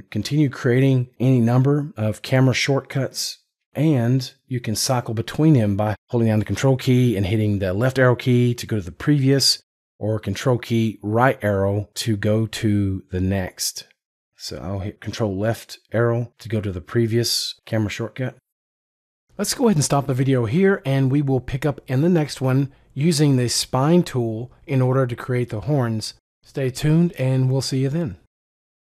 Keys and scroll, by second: 14.7 ctrl+Left.